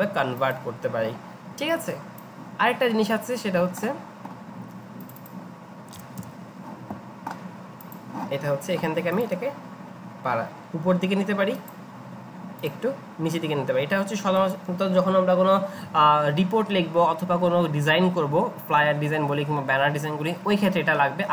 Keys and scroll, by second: 5.9 BackSpace, 6.2 Return.